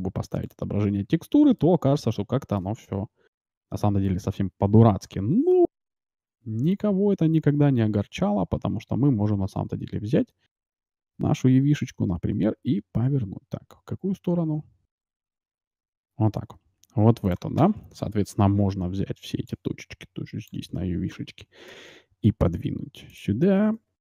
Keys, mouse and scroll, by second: 1.3 middle click, 1.5 right click, 1.7 middle click, 5.6 Tab, 6.8 a, 7.1 a, 8.6 r, 18.4 a, 18.7 b, 21.7 g, 23.6 a, 23.9 b.